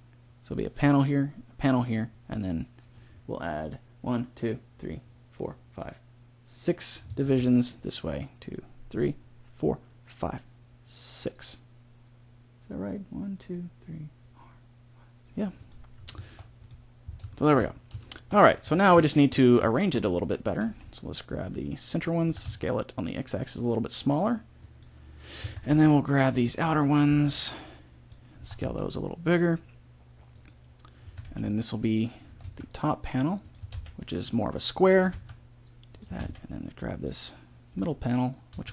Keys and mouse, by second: 7.1 ctrl+r, 18.6 a, 20.6 b, 22.2 s, 25.3 a, 25.7 b, 27.0 b, 28.3 s, 31.0 a, 31.2 b, 32.2 g, 33.6 a, 33.7 b, 34.9 g, 36.1 b, 36.1 a, 37.7 g.